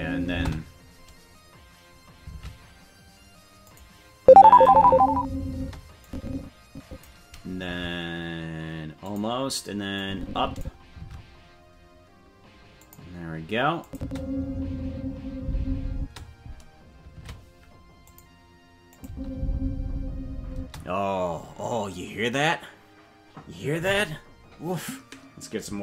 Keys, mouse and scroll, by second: 0.4 space, 2.4 shift+`, 4.5 click, 4.7 space, 5.6 space, 6.0-7.0 drag, 7.6 shift+`, 10.0 click, 11.1 shift+`, 13.8 click, 14.0 space, 15.9 space, 17.1 shift+`, 18.9-20.8 drag, 19.0 space, 20.5 space.